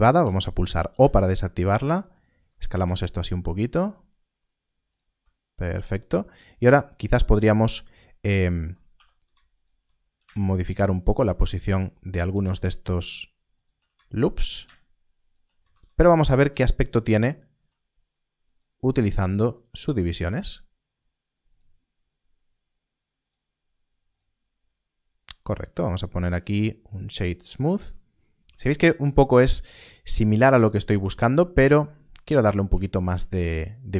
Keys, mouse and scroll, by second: 0.1 right click, 2.1 s, 2.1 click, 2.2 g, 4.8 shift+click, 8.2 alt+click, 9.5 alt+click, 10.0 g, 11.4 shift+click, 11.9 alt+click, 13.4 shift+click, 14.1 alt+click, 14.4 g, 15.1 shift+click, 15.9 alt+a, 18.4 Tab, 18.4 click, 25.7 right click, 26.6 click, 28.3 click, 28.4 Tab, 30.4 Tab, 31.3-31.9 scroll up 1.